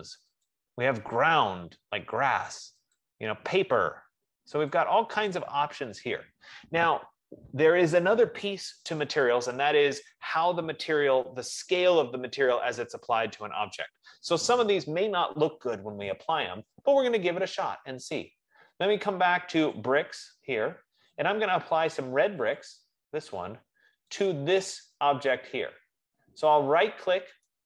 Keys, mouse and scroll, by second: 0.8 click, 3.3 click, 5.1 click, 20.1 click, 23.1 click, 24.7 click.